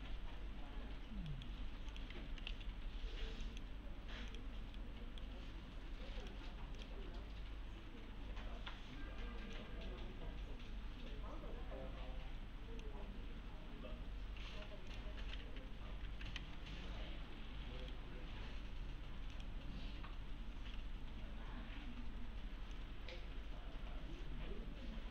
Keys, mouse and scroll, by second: 1.3 right click, 1.9 click, 2.1-3.0 typing, 2.8-3.4 scroll down 1, 3.4 click, 4.8-5.4 right click, 6.2 click, 9.6-11.4 drag, 15.4 F3, 16.4 alt+x, 17.8 right click, 19.3 click, 22.7-25.1 click.